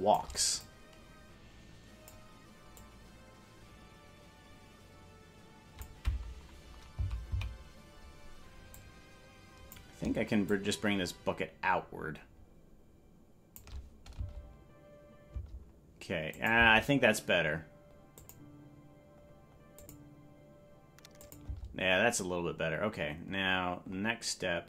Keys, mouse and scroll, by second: 0.5-2.1 drag, 2.7-5.8 drag, 7.0 Left, 7.3 Left, 8.7-9.7 drag, 10.4-13.6 shift+drag, 14.1 space, 15.3 space, 16.3 click, 16.5 space, 18.1 click, 19.8 click, 21.2 click, 21.4 space, 22.1-24.6 drag.